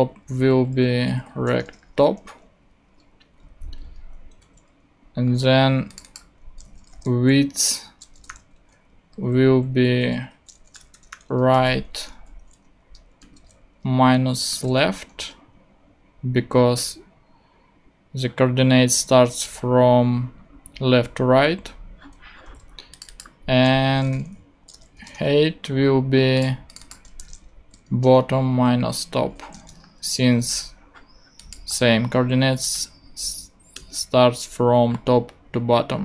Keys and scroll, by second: 0.0-0.1 typing, 0.2 alt+p, 0.6 alt+Right, 1.5-2.3 typing, 3.4 Right, 4.4 super+Right, 6.6-8.8 typing, 8.9 alt+h, 9.1 alt+Right, 10.0 alt+shift+Right, 10.7-12.1 typing, 12.8 Return, 13.2 ., 14.3-15.1 typing, 22.5 super+d, 23.8-25.6 typing, 27.2 b, 27.9 Return, 28.4 alt+Return, 28.5 alt+Right, 29.1 alt+shift+Right, 29.5-30.3 typing, 33.7 Return.